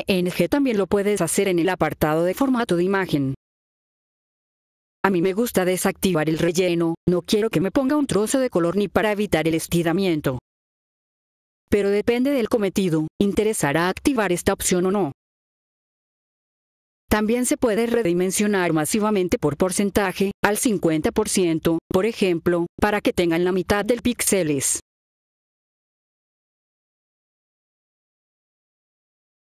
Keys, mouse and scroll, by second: 2.1 click, 6.6 click, 13.3 click, 13.7 click, 14.2 click, 14.5 click, 14.8 click, 15.1 click, 15.4 click, 15.7 click, 16.5 F4, 17.0 click, 20.3 click, 22.9 click, 25.5-25.8 typing, 26.2 click, 29.0-29.4 typing.